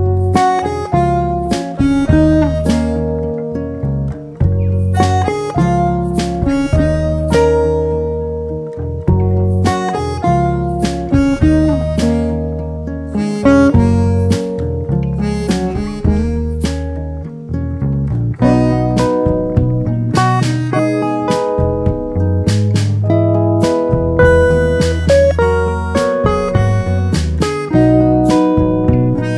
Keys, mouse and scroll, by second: 1.4 a, 3.4 click, 4.3 g, 4.4 z, 7.3 click, 8.6 g, 8.7 z, 9.5 click, 10.7 g, 10.8 z, 12.0 click, 13.9 drag, 14.3 shift+click, 15.2 ctrl+j, 18.0 click, 19.0 click, 23.2 click, 24.5-28.0 drag.